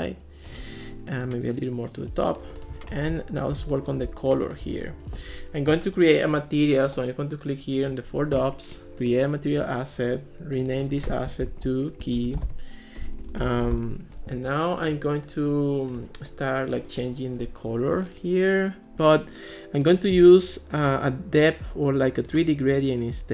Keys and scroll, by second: 11.9-14.3 typing.